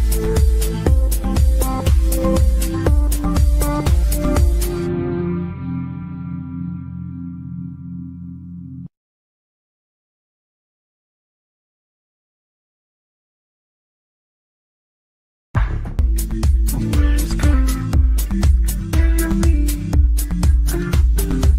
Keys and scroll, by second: 7.1 Delete.